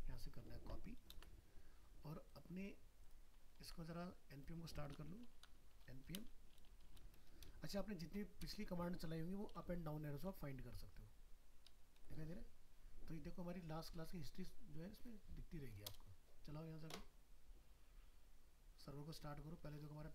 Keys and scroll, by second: 1.1 ctrl+c, 3.6 ctrl+s.